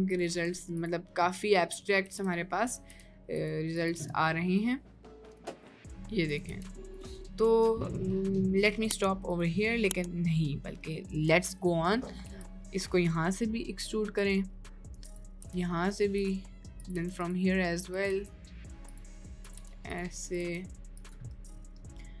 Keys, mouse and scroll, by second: 0.1 click, 1.5 middle click, 2.1 g, 2.9 e, 3.8 click, 4.0 e, 5.7 e, 5.7 middle click, 6.3 click, 6.5 e, 7.1 middle click, 8.1 middle click, 8.7 middle click, 9.3 click, 9.6 middle click, 10.8 click, 12.3 g, 13.8 e, 15.4 e, 17.0 e, 17.9 click, 18.1 e, 19.3 click, 19.7 e, 20.3 click, 20.5 e, 21.3 middle click.